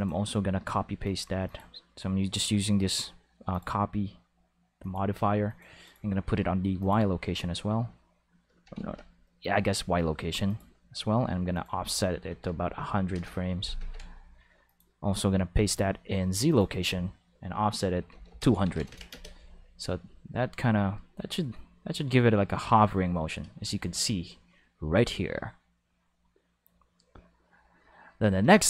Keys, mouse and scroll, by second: 1.0 click, 1.5 click, 3.5 click, 4.8 click, 5.5 click, 5.9 click, 6.8 click, 8.8 ctrl+z, 8.9 5, 10.5 click, 11.5 click, 12.5 5, 12.7 scroll down 2, 12.8 5, 12.9 5, 13.2 Return, 13.2 5, 13.8 ctrl+5, 14.7 click, 15.7 click, 16.5 click, 17.9-19.2 typing, 18.4 Return, 18.6 ctrl+5, 23.8 alt+a, 24.0 5.